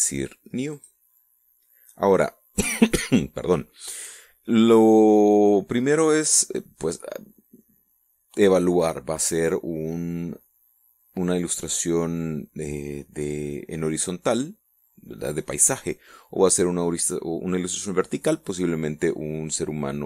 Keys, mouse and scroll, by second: 0.8 click.